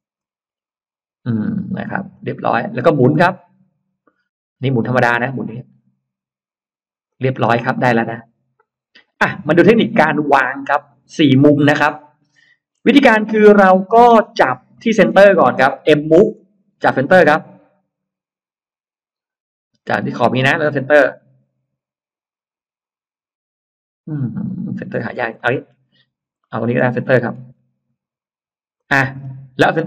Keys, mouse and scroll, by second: 0.1-1.1 scroll up 2, 2.0 click, 2.7-3.3 scroll up 2, 4.5 click, 6.9 click, 7.3 space, 7.4-7.7 scroll up 1, 7.9-8.9 middle drag, 7.9 space, 9.1-10.6 scroll down 3, 10.3-12.5 middle drag, 12.7-13.5 scroll up 2, 13.5 middle click, 14.2-14.5 scroll down 1, 14.6 middle click, 15.4-16.1 scroll up 1, 16.3 m, 25.2 middle click, 25.4-25.7 scroll down 1, 26.3 middle click, 26.9-27.7 scroll up 4, 28.6 click, 29.0 scroll down 2.